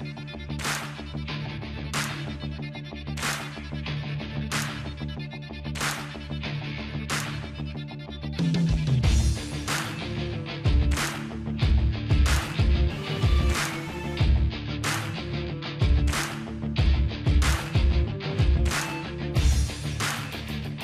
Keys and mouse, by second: 1.1 ctrl+z, 2.5 Delete, 3.8 ctrl+z, 4.4-6.0 drag, 5.4 Delete, 7.5-10.0 drag, 9.6 Delete, 10.3 z, 11.1-12.6 drag, 12.1 g, 13.1-14.2 drag, 14.9 ctrl+s, 16.0 ctrl+s, 16.8 middle click, 17.1-18.9 middle drag, 19.4-20.8 middle drag.